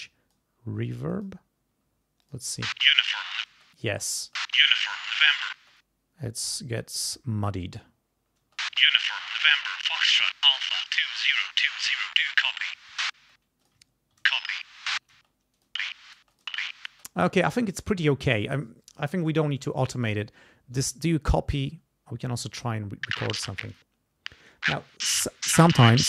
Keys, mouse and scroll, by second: 1.0 click, 2.2 click, 2.5 space, 3.5 space, 3.7 click, 4.2 space, 5.5 space, 5.7 click, 8.4 space, 10.4 click, 13.2 space, 13.6 ctrl+click, 13.9 ctrl+scroll up 2, 14.2 ctrl+space, 14.9 ctrl+scroll down 2, 15.1 ctrl+space, 15.5 ctrl+click, 16.3 ctrl+click, 21.7-22.4 ctrl+scroll down 4, 23.0 click, 23.7 click.